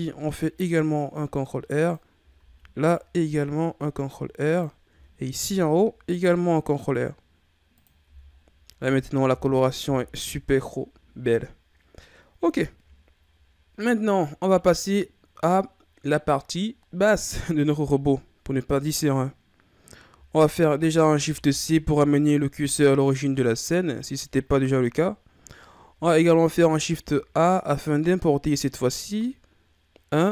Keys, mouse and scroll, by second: 2.4 ctrl+r, 5.3 ctrl+r, 8.0 Tab, 8.3-9.2 scroll down 9, 9.2 a, 9.6 scroll down 3, 9.8 a, 12.9-13.5 shift+scroll up 2, 13.5-14.9 scroll up 1, 21.2 shift+c, 26.5 shift+a.